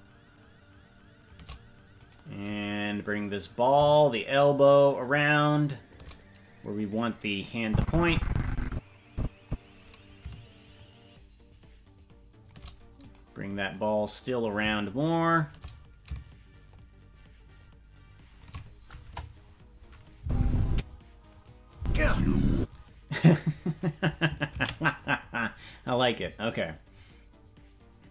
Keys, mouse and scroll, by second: 2.0-3.9 right drag, 3.9-5.9 shift+drag, 6.8 right click, 7.6-9.5 drag, 10.7-12.5 shift+drag, 13.1 right click, 14.4-15.5 drag, 16.6-18.4 shift+drag, 19.0 KP_0, 20.2 space, 20.7 space, 21.7 space, 22.5 space, 26.8 ctrl+s.